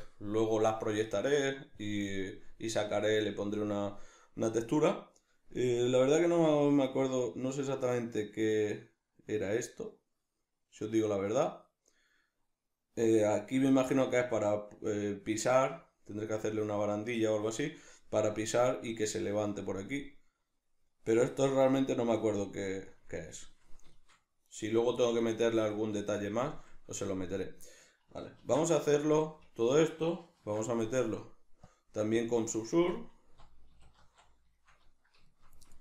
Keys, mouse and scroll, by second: 24.5 right click, 25.2-31.7 ctrl+middle drag, 28.4 ctrl+2, 29.5 Tab, 30.3 ctrl+2, 31.7 click, 32.2 click, 32.7 Tab, 34.5-35.8 shift+middle drag.